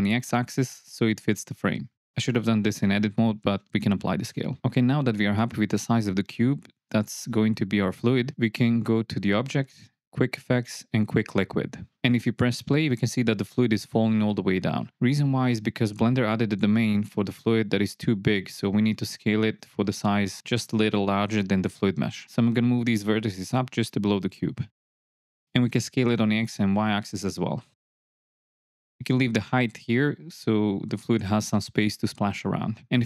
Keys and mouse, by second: 0.3 x, 3.8 ctrl+a, 5.4 middle click, 6.2-7.9 middle drag, 8.7-11.7 drag, 12.4 space, 15.8 space, 16.4 Tab, 17.0 middle click, 19.9 KP_1, 21.1 click, 22.3 g, 22.7 z, 25.1 s, 25.2 x, 26.4 click, 26.7 KP_3, 28.0 s, 28.1 y, 29.9 middle click, 30.4 click, 32.3 Tab.